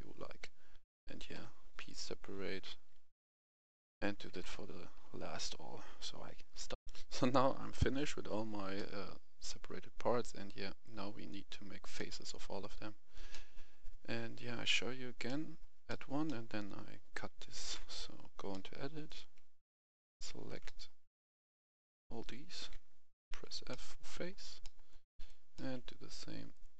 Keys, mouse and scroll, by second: 1.3 p, 1.7 click, 2.9 a, 3.5 a, 3.8 Tab, 6.7 middle click, 6.7 F10, 8.6-13.2 middle drag, 14.5 right click, 15.1 middle click, 16.1 shift+middle click, 16.7-17.5 scroll up 1, 17.5 Tab, 18.4 middle click, 18.9 right click, 19.6 shift+right click, 20.5 middle click, 21.2 shift+right click, 21.6 shift+right click, 23.2 shift+f, 23.5 middle click, 25.0 right click, 25.4 middle click, 26.4 shift+right click.